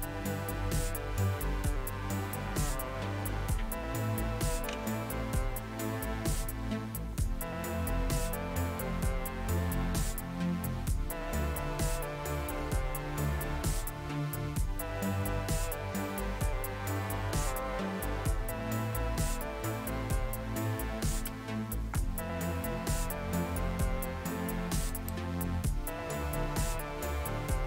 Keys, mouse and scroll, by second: 24.9 click.